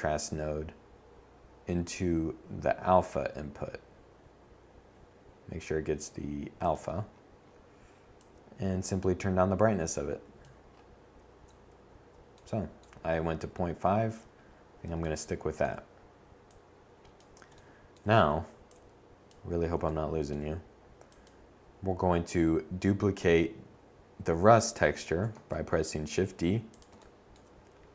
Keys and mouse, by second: 4.4-5.4 drag, 23.0 shift+d.